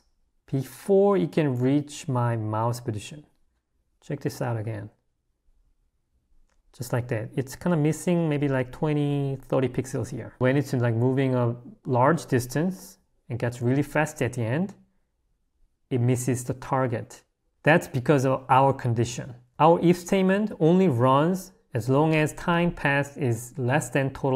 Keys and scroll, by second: 17.5 Escape, 18.0-20.3 typing.